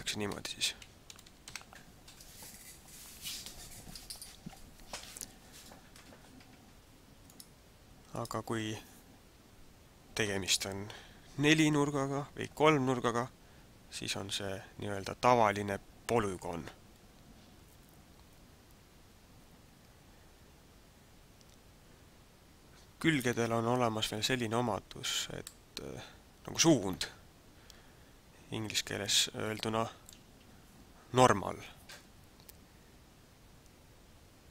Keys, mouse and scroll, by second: 25.6 middle click.